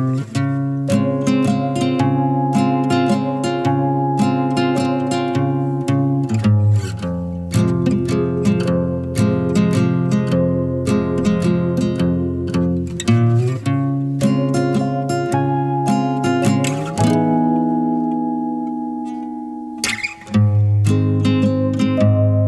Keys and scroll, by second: 1.9 4, 4.1 5, 8.6 0, 20.4-21.5 typing.